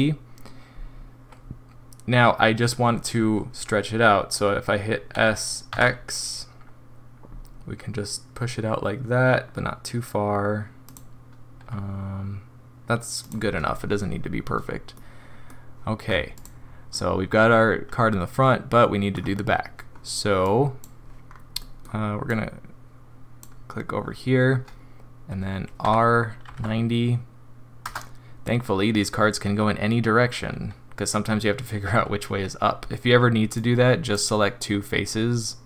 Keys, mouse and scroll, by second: 5.1 s, 11.6 g, 13.6-14.6 scroll down 3, 14.9 middle click, 16.3 click, 16.9 middle click, 20.4 click, 21.2 scroll down 2, 21.6 middle click, 22.3 click, 25.8 r, 33.5 click.